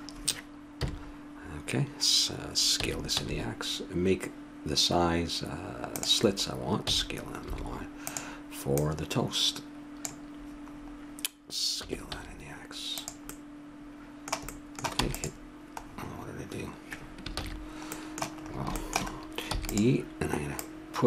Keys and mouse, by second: 0.7 KP_7, 2.8 s, 6.8 s, 8.8-10.4 drag, 10.7-12.8 middle drag, 11.8 s, 13.3 middle click, 14.9 e, 17.3 ctrl+z, 19.5 e, 20.8-21.0 drag.